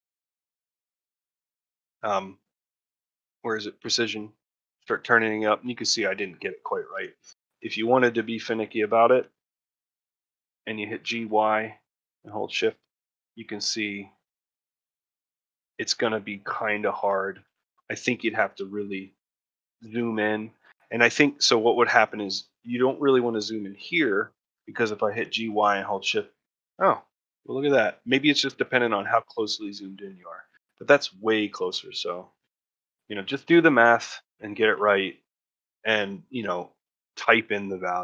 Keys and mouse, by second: 7.2 middle click, 7.6 shift+middle click, 7.9 ctrl+middle click, 8.2 shift+middle click, 8.8 shift+middle click, 9.1 ctrl+middle click, 9.4 shift+middle click, 10.0 shift+middle click, 17.4 shift+middle click, 17.9 shift+middle click, 18.5 ctrl+middle click, 19.4 shift+middle click, 19.8 ctrl+middle click, 25.5 shift+g, 31.7 ctrl+middle click, 32.0 ctrl+middle click, 32.4 ctrl+middle click, 32.8 shift+middle click, 33.3 ctrl+middle click, 33.7 shift+middle click, 34.3 ctrl+middle click, 34.7 shift+middle click.